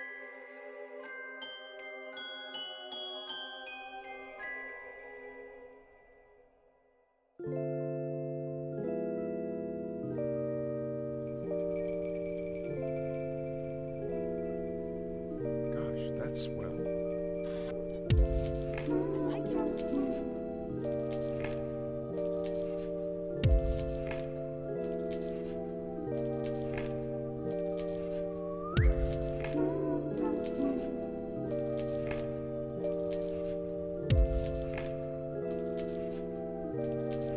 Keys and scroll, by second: 3.5 u, 5.0 z, 11.4 alt+x, 15.2 z, 21.0 F9, 21.8 ctrl+s, 22.4 z, 23.9 alt+x, 26.7 ctrl+s, 29.5 alt+z, 29.8 alt+], 32.2 alt+[, 32.4 ctrl+s, 32.9 ctrl+a.